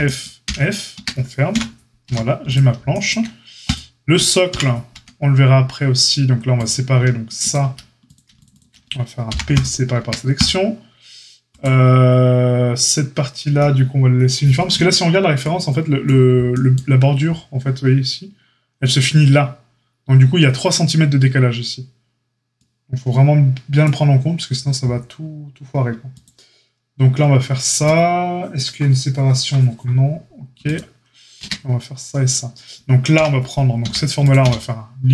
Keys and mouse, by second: 0.4 f, 0.9 Tab, 1.5 KP_Divide, 2.0 a, 3.6 click, 4.5 KP_Divide, 4.9 Tab, 6.6 click, 7.4-8.4 alt+shift+middle drag, 8.4 alt+shift+click, 8.5-10.3 alt+shift+middle drag, 9.2 p, 9.9 Tab, 10.3-11.6 drag, 11.6-26.1 middle drag, 26.1 click, 26.2-30.6 middle drag, 30.6 click, 30.7-35.1 middle drag, 31.3 Tab, 33.1 KP_Divide, 33.8 a, 34.4 q.